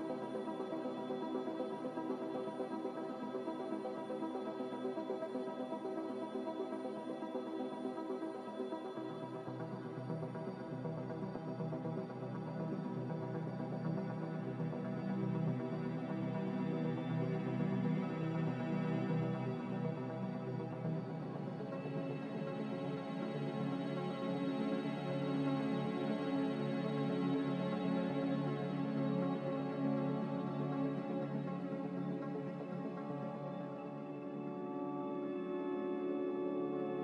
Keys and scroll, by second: 0.0-2.4 typing, 4.7 x, 6.4 typing, 6.9 Return, 10.6 typing, 11.1 Return, 11.9 z, 15.7 typing, 17.8-18.6 typing, 20.3-21.0 typing, 23.3-24.0 typing, 25.1-25.8 typing, 25.8 Return, 28.7 typing, 29.0 Return, 33.3 z, 34.7 z, 36.4 typing.